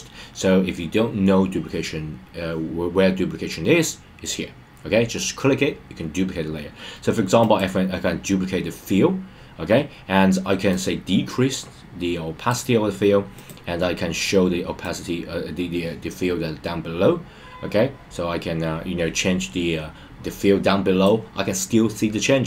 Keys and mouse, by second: 10.7-12.5 drag, 13.3 click, 14.8-21.0 drag.